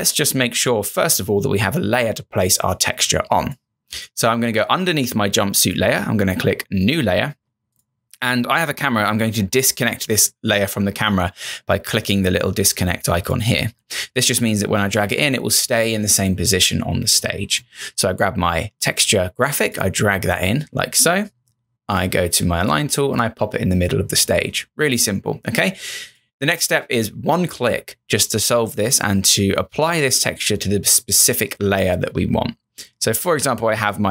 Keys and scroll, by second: 14.6 space.